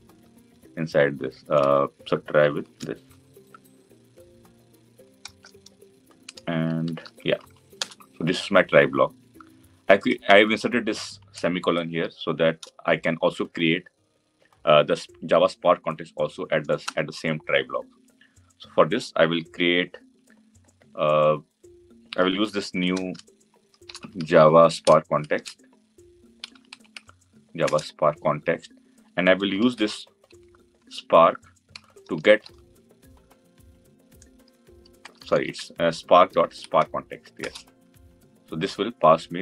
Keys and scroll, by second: 27.5 Return, 31.5 Return, 37.2 Return.